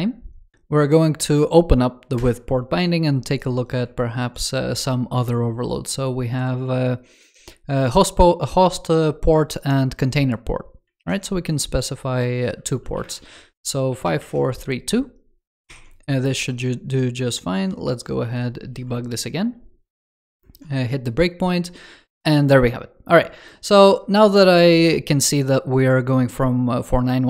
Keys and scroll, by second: 3.8 super+f, 10.8 super+w, 15.5 super+s.